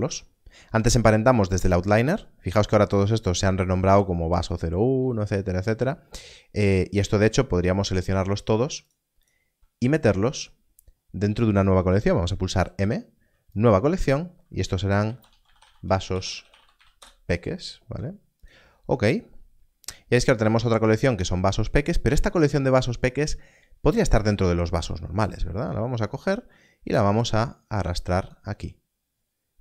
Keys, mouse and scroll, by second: 0.0-2.3 shift+scroll down 2, 6.3-6.8 scroll up 1, 6.8-7.6 scroll down 1, 8.4 click, 10.6-12.4 scroll down 1, 13.5 click, 15.0-16.4 typing, 16.9 Return, 18.4 click, 24.5-24.9 scroll up 1, 24.9-25.6 scroll down 1, 25.7 click, 29.2-29.6 scroll up 1.